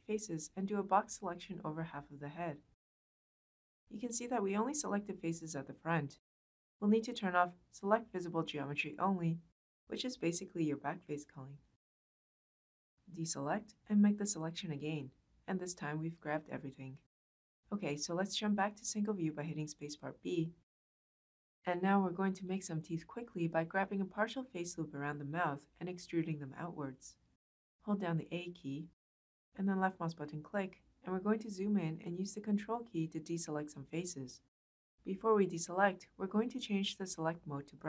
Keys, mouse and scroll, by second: 0.5-2.9 drag, 12.1-13.3 drag, 13.5-14.5 drag, 19.2 space, 19.2 b, 24.7 click, 27.3 a, 29.6 click.